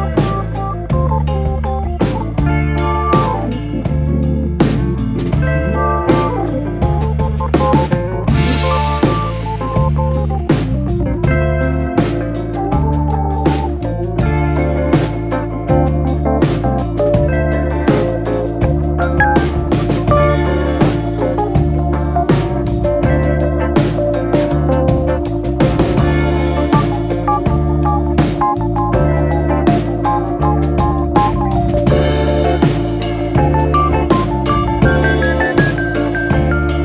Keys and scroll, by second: 0.0-0.7 typing, 2.5 typing, 4.6-6.7 typing, 8.8 m, 10.3-11.0 typing, 12.5-14.4 typing, 18.1-18.9 typing, 21.9-23.3 typing.